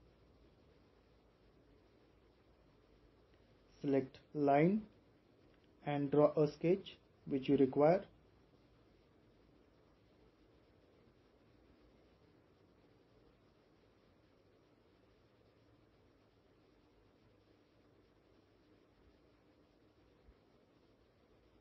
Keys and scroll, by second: 13.0-13.3 typing, 17.0 typing, 20.0-20.7 typing.